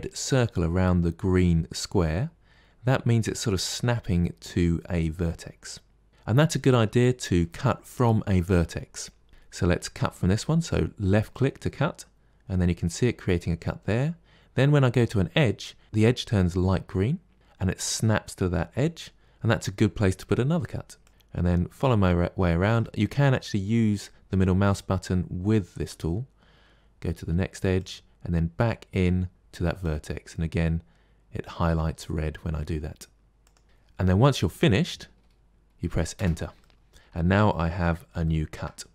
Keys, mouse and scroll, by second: 21.1-27.5 middle drag, 36.5-37.5 middle drag, 37.5 scroll up 3, 38.1 shift+middle click.